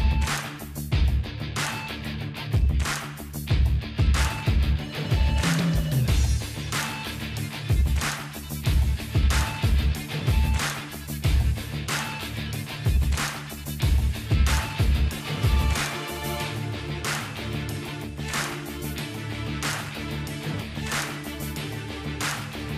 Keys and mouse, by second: 0.0-1.3 drag, 0.7 ctrl+f, 1.5 f, 2.1 ctrl+b, 3.7 ctrl+b, 5.5-6.5 drag, 5.8 Delete, 6.7 click, 7.4-9.8 middle drag, 9.8 click, 10.4 ctrl+i, 10.6 h, 11.0-12.0 drag, 11.1-13.6 middle drag, 11.4 Tab, 11.4 right click, 13.3 click, 13.3 right click, 13.7 ctrl+f, 14.6 middle click, 15.2 ctrl+f, 16.7 ctrl+f, 17.6-20.7 drag, 19.4 alt+h, 19.9 KP_0, 20.4 z, 20.9 middle click, 21.4 click, 22.6 s.